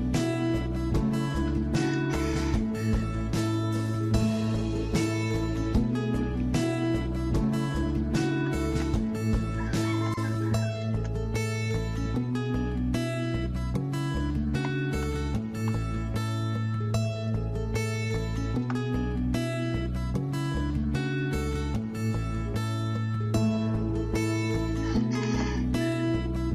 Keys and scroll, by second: 0.1 Escape, 1.3-2.0 typing, 6.2 Escape, 8.2-9.5 typing, 14.3-15.1 typing, 15.6 Return.